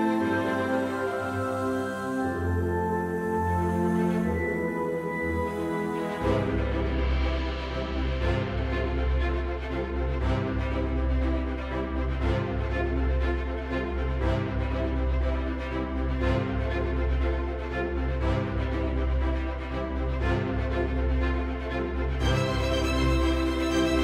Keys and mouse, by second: 0.2 right click, 2.6 middle click, 4.1 middle click, 5.4 shift+click, 6.0 middle click, 7.3 shift+click, 8.7 ctrl+b, 12.1 right click, 14.6 Tab, 15.8-17.6 middle drag, 18.3 q, 21.9 s, 23.2 click.